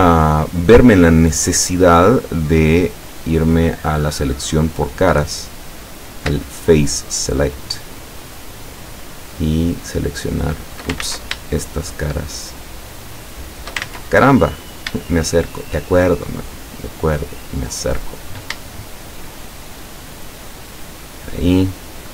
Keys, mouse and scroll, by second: 0.0-0.3 scroll up 1, 0.5 scroll up 2, 1.5 scroll down 2, 3.1 click, 5.5 right click, 6.9 shift+right click, 8.3 shift+right click, 9.2 shift+right click, 10.2 shift+right click, 11.1 ctrl+shift+z, 12.0 shift+right click, 12.6 shift+right click, 13.3 shift+right click, 13.9 ctrl+shift+z, 14.4 ctrl+shift+scroll up 2, 15.8 shift+right click, 16.3-17.0 shift+middle drag, 18.0 shift+right click, 18.7 shift+scroll up 1, 18.7-20.8 shift+middle drag, 21.2 shift+right click.